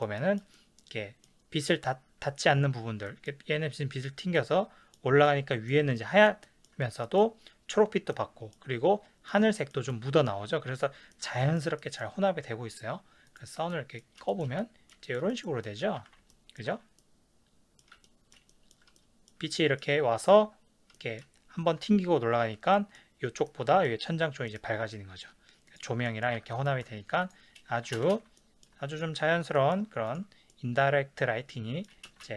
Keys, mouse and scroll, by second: 13.3 click, 13.7-25.7 shift+middle drag, 16.0 ctrl+s, 25.7 click, 26.1-27.2 middle drag, 26.5 s, 27.2 click, 28.0 ctrl+space, 28.4-28.9 ctrl+middle drag, 28.9 click, 29.5 ctrl+middle click, 30.1 click, 30.5-31.6 middle drag, 32.1 ctrl+space.